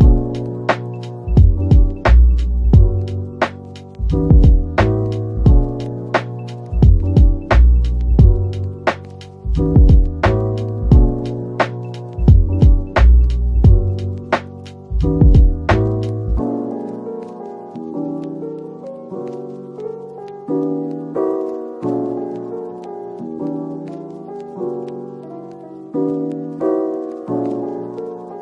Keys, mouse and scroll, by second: 0.5 typing, 7.5-8.0 typing, 9.7-10.6 typing, 12.2-12.7 typing, 13.6 right click, 27.9 typing.